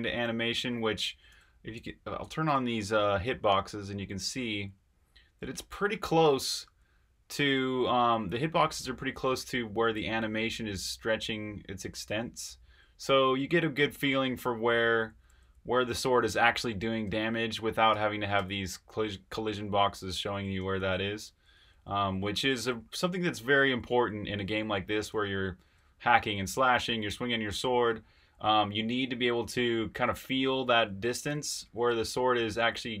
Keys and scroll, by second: 0.0-6.6 typing, 8.0-8.6 typing, 9.6-33.0 typing.